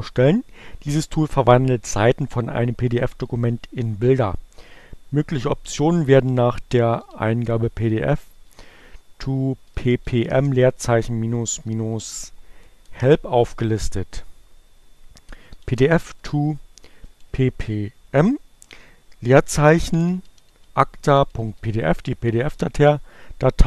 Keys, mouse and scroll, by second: 4.6-5.5 typing, 7.6 o, 8.0 p, 9.7 m, 10.0 space, 10.2 -, 11.3 e, 11.7 p, 12.7 Return, 14.9-16.3 typing, 17.8 space, 19.2-21.2 typing, 22.9 space.